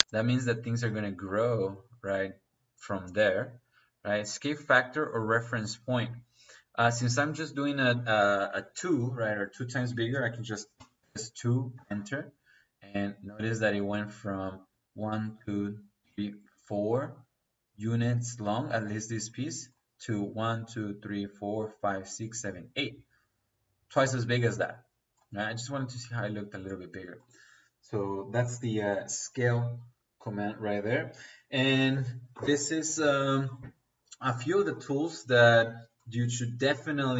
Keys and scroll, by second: 10.7 KP_2, 11.7 Return.